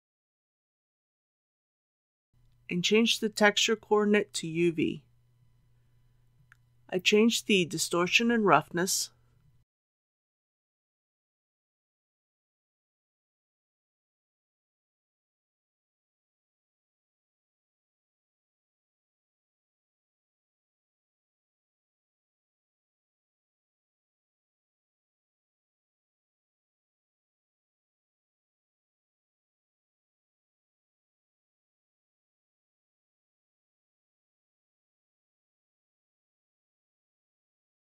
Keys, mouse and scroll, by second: 3.3-4.9 drag, 15.7 KP_2, 15.9 KP_5, 17.6 Tab, 18.8 KP_Decimal, 19.1 KP_8, 26.0 click.